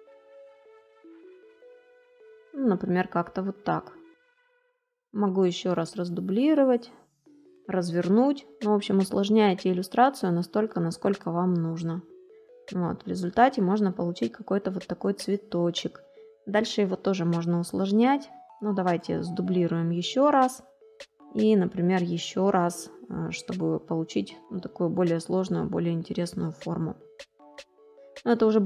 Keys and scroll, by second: 12.1 space.